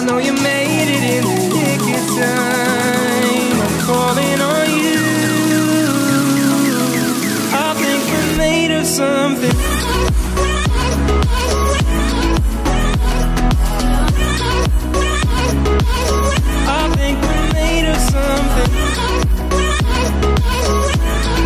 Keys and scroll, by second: 8.2 ctrl+0.